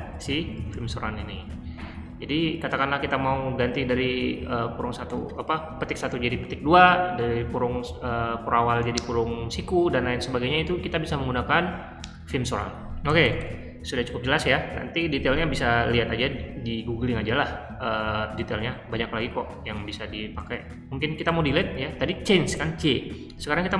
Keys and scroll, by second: 0.0-1.2 typing, 3.6-4.5 typing, 13.0 typing, 21.2-21.5 typing.